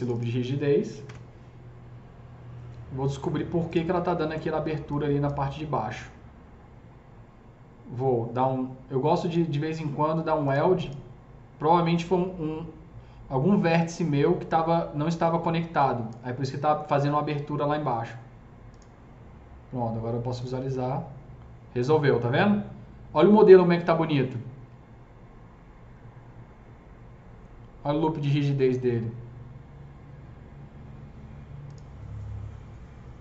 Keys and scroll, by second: 0.9 ctrl+BackSpace.